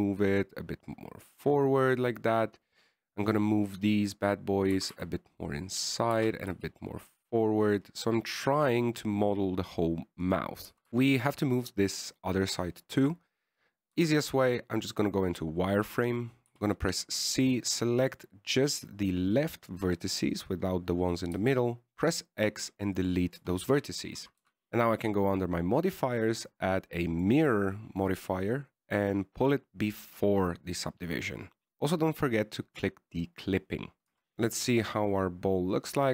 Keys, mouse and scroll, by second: 4.6 right click, 6.1 g, 7.5 g, 12.3 right click, 15.3 z, 16.3 right click, 17.8 c, 22.7 x, 24.7 Tab, 24.9 z, 26.0 click, 29.4 click, 34.3 Tab, 34.3-34.7 scroll up 1, 34.8 right click, 35.4 g.